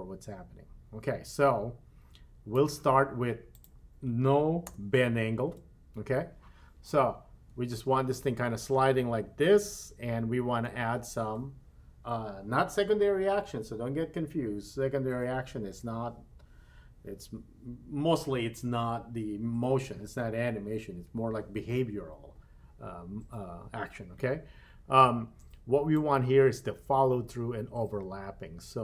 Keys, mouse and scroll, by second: 3.5-5.5 drag, 7.5 space, 10.6 space, 26.0-28.8 drag.